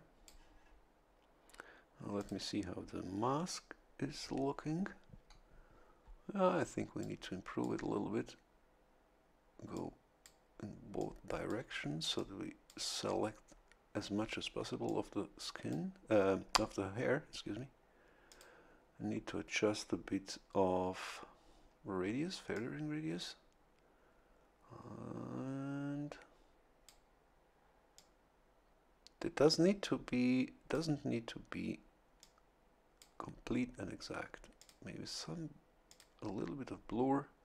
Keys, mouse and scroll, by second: 2.1 click, 3.2-3.5 scroll down 1, 7.0 click, 9.7 click, 10.9 click, 12.1 click, 14.8-15.9 drag, 18.3 click, 22.5-27.0 drag, 27.9-30.9 drag, 32.2 click, 34.5 click, 35.8 click.